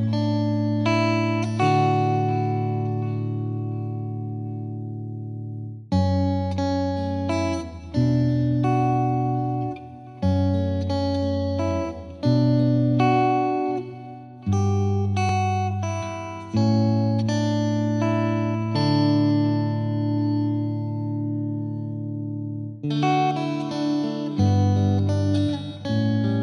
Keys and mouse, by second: 2.3 click, 4.0 click, 5.7 right click, 6.6 click, 7.3 click, 8.8 click, 14.7 click, 16.8 click, 21.9 click, 22.4 ctrl+k, 23.6 click, 24.1 click.